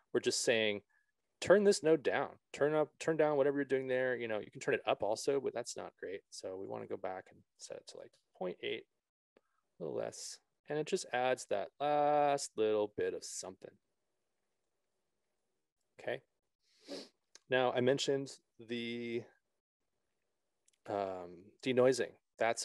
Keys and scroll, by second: 7.9 KP_Decimal, 8.5 8, 8.5 Return.